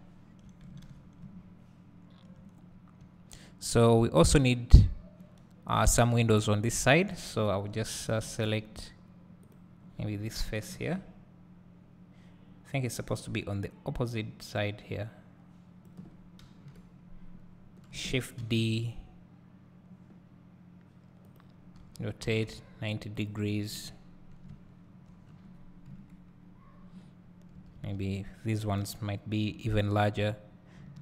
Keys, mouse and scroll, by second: 2.6 scroll down 1, 3.0 `, 7.2 scroll up 1, 7.4 `, 8.0 scroll up 1, 8.6 Tab, 10.7 ctrl+l, 12.1 ctrl+l, 13.3-21.4 drag, 16.6 KP_7, 17.5 scroll down 1, 18.5 shift+d, 22.0 r, 23.3 click, 23.8 KP_Decimal, 25.3 scroll down 2, 25.9 KP_3, 26.9 scroll down 1, 27.8 s, 30.4 click.